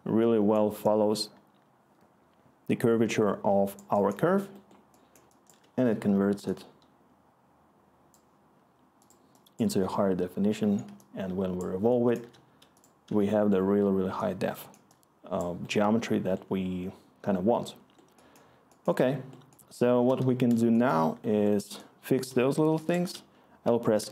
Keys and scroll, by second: 0.0-1.2 scroll, 24.0 s.